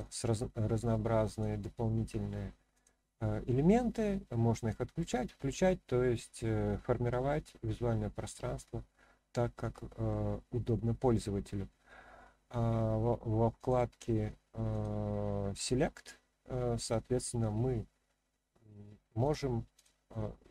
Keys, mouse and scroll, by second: 1.3-2.8 drag, 7.2-10.1 middle drag, 13.6 click, 15.7-18.8 drag, 19.2 click, 19.7 click.